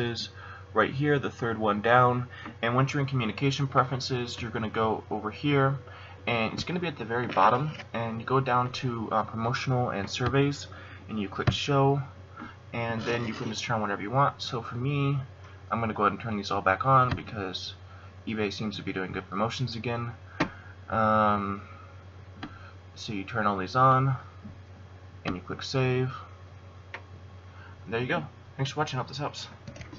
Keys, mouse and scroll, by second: 4.7 click, 29.7 F12.